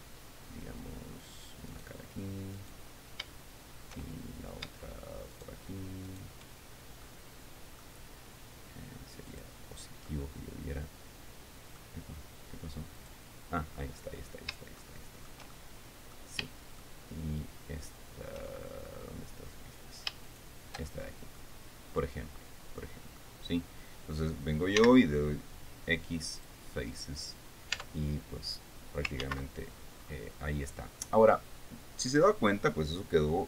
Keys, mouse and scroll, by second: 2.2 right click, 3.1 right click, 5.9 shift+right click, 6.6 shift+right click, 7.6 middle click, 9.8 click, 10.6-12.5 middle drag, 13.5 click, 14.2-14.9 scroll up 3, 15.4 shift+middle click, 16.1 shift+middle click, 17.0 shift+middle click, 20.8 shift+right click, 21.6-21.9 shift+scroll down 3, 21.9 middle click, 22.8-23.2 scroll down 2, 25.4 x, 27.0 click, 27.8 scroll down 2, 28.3 Tab, 29.8 ctrl+z, 30.6-30.9 scroll up 2, 31.0 scroll down 2.